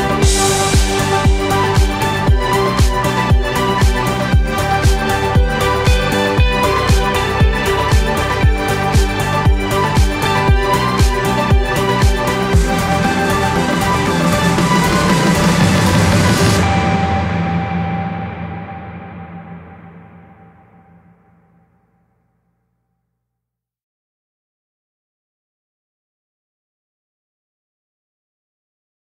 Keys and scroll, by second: 20.8 typing, 21.7 Return, 27.0 typing.